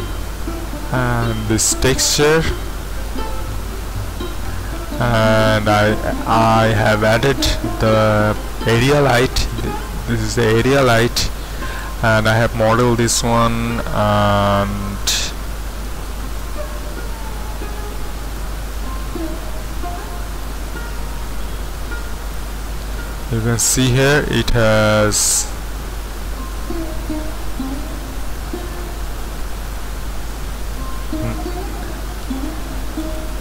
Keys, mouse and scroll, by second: 2.6-6.4 middle drag, 8.8 typing, 13.4-14.1 typing, 15.5-16.1 typing, 19.0 typing, 21.0-21.6 scroll up 1, 21.6 scroll up 1, 23.0 typing, 27.3 z, 28.9-29.6 typing, 30.8 Escape, 32.3 z.